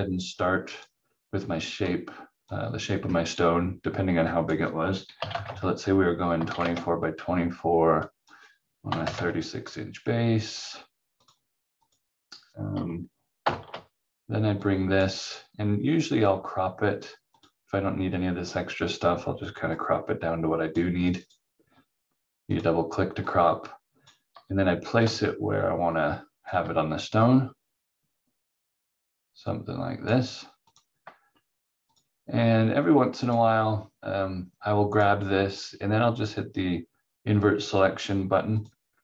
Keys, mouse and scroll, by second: 5.2 2, 5.4 Tab, 6.4 4, 6.6 Tab, 8.0 click, 8.8 3, 10.5 click, 13.4 shift+Page_Up, 14.6 click, 38.6 click.